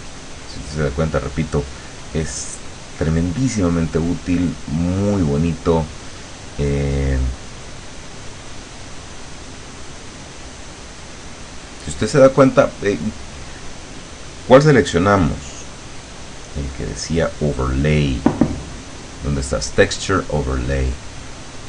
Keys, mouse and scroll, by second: 0.1 click, 2.8 click, 7.7 click, 8.4-12.6 drag, 12.9-14.2 drag, 14.6 click, 15.2 click, 21.2 click.